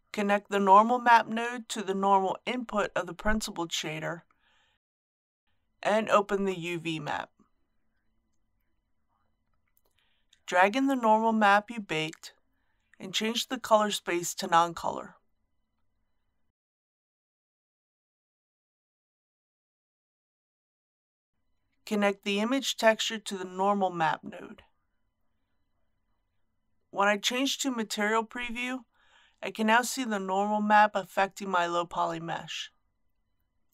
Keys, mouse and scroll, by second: 6.4 click, 10.1 middle click, 11.5-23.5 drag, 26.8 middle click, 28.9 click, 30.2-30.5 scroll up 1.